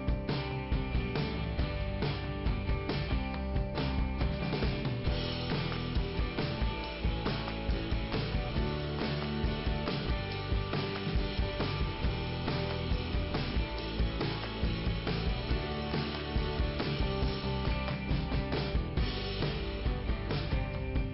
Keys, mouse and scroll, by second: 2.1 click, 3.2 click, 4.4 click, 7.4 click, 8.6 middle click, 9.9 click, 11.0 click, 12.6 click, 13.5 click, 13.8 click, 13.9 double click, 14.5 double click, 15.8 click, 15.9 click, 17.1 scroll down 1, 17.8 click, 18.6 p, 19.2 scroll down 2.